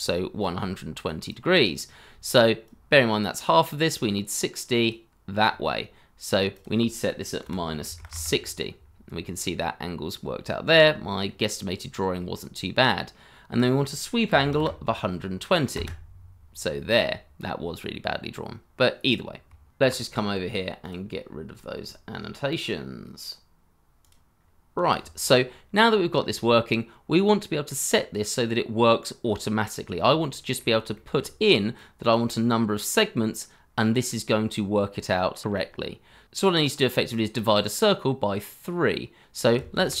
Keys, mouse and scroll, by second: 0.4 double click, 4.3 double click, 7.4 -, 7.8 6, 8.1 Return, 8.1 0, 9.0-10.1 scroll up 1, 10.8 shift+middle click, 14.3 1, 14.4 2, 14.5 0, 15.7 Return, 19.8 t, 21.2-24.8 scroll down 1, 26.2-28.3 scroll up 1, 29.8-30.1 scroll down 1, 30.2 shift+middle click, 34.9 scroll up 1, 39.5-40.0 typing.